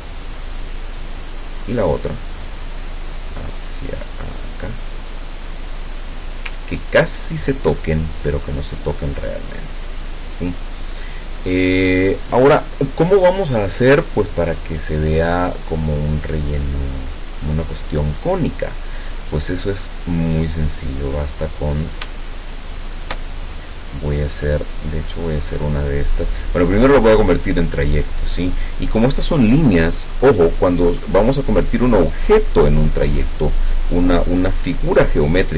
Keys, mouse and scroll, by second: 0.8 click, 3.6 click, 5.7 click, 6.7-7.3 ctrl+scroll up 2, 7.3 ctrl+scroll up 1, 7.9-8.4 ctrl+scroll down 2, 8.6 ctrl+scroll down 2, 10.1 click, 20.5 click, 22.7 shift+click, 25.3 click, 26.6 click, 27.7 click, 31.1 click.